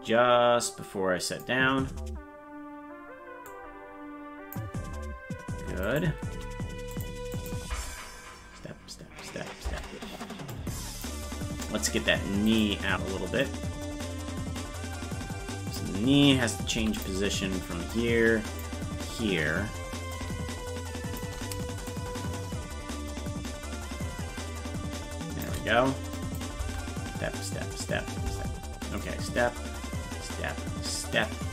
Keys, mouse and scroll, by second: 0.6 click, 3.4-4.5 drag, 5.8 right click, 6.3 g, 7.3 click, 7.6 space, 10.5 click, 10.5 space, 12.5 right click, 13.5-15.8 drag, 16.8 i, 18.0 click, 20.2-21.2 drag, 21.9-25.5 shift+drag, 26.2 click, 26.6 space, 29.0-31.5 drag.